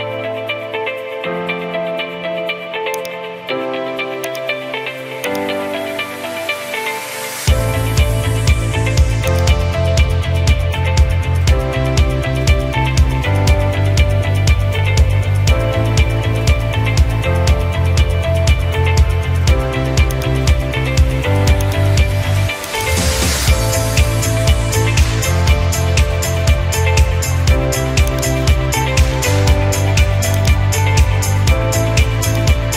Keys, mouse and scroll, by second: 3.1 click, 4.3 click, 6.2-6.6 scroll, 7.2 scroll, 9.4 click, 10.8-11.3 scroll, 12.1 scroll, 16.2 middle click, 16.2 middle click, 18.1 middle click, 18.6 middle click, 18.7 middle click, 20.8 middle click, 21.7 click, 22.8 click, 23.0 click, 26.9 middle click, 28.2 click, 28.5-29.3 drag, 30.4 click, 32.3 click.